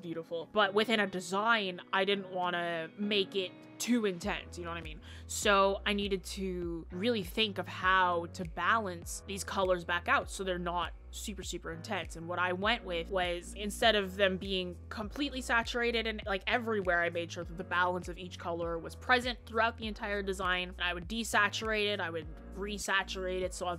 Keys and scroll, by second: 0.8-1.2 scroll down 1, 1.2 scroll up 1, 3.8-4.1 scroll down 1, 4.1 scroll up 1.